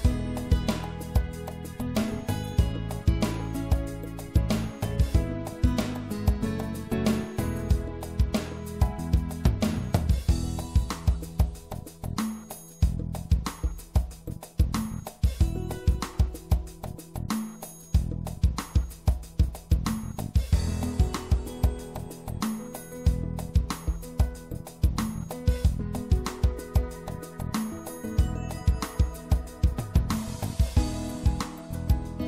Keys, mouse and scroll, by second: 1.8-5.3 right drag, 6.4 e, 8.5-9.5 middle drag, 9.5 click, 10.6-15.1 middle drag, 15.1-16.8 drag, 17.1-20.0 middle drag, 19.0 ctrl+r, 23.5-26.9 middle drag, 26.9-30.0 drag, 30.0 right click, 31.9-32.2 middle drag.